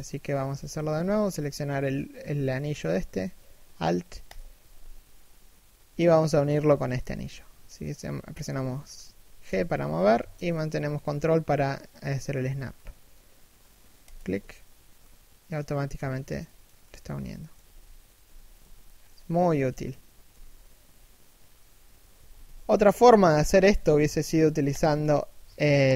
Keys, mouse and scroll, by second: 0.2 a, 0.6 z, 0.9 KP_3, 1.9 KP_1, 3.9 alt+right click, 9.1 g, 14.6 middle click, 17.3 KP_3, 17.8 KP_1, 18.3 z, 18.5-22.8 scroll down 1, 23.1-24.3 scroll up 1, 24.3 alt+shift+right click.